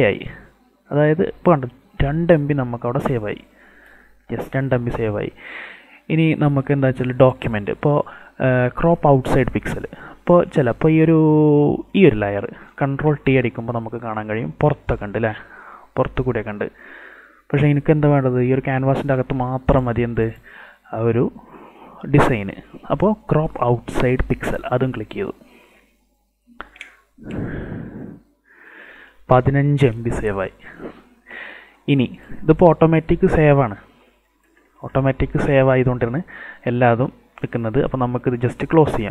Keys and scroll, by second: 13.0 ctrl+t.